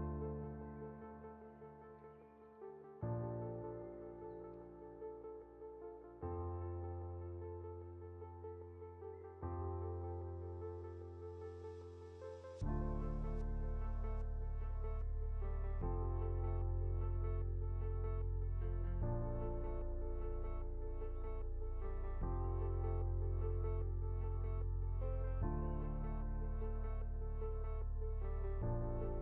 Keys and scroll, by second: 4.8 ctrl+g, 11.6 Up, 24.2 ctrl+0, 26.5 ctrl+g.